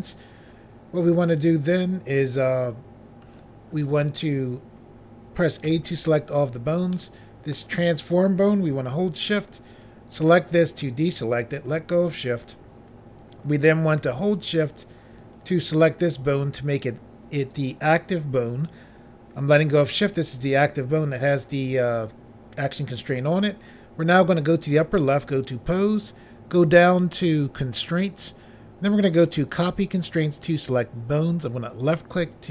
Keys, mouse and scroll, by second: 5.6 a, 6.9 middle click, 9.7 shift+click, 9.8 shift+click, 10.2 shift+click, 10.3 shift+double click, 15.2 shift+click, 25.3 click, 31.7 click.